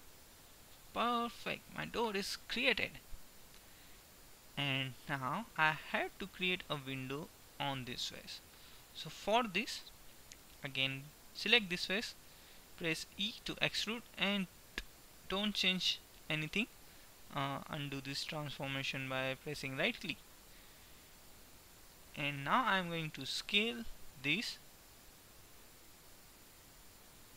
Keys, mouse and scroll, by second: 1.0-2.0 middle drag, 7.2 right click, 7.8-9.3 middle drag, 13.0 e, 20.7 middle click, 23.8 s, 26.7 s.